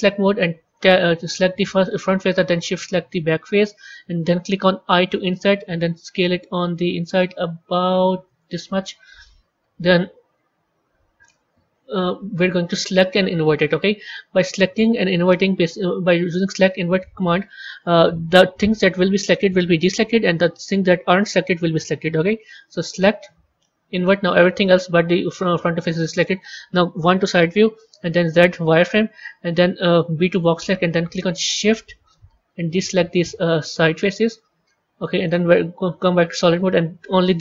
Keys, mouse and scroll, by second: 0.6 click, 1.2-2.7 middle drag, 2.7 shift+click, 3.2-4.8 middle drag, 12.9-16.0 drag, 16.3-19.4 drag, 22.7-25.7 drag, 25.7-26.9 middle drag, 26.9 KP_1, 28.1 z, 30.1 b, 34.6 z, 35.7-37.4 middle drag.